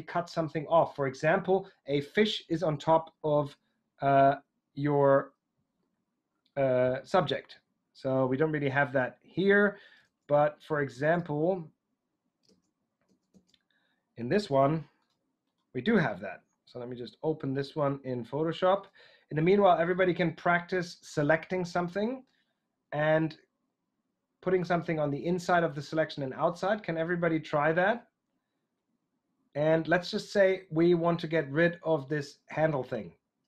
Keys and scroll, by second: 9.9 super+Tab, 12.4 super+Tab.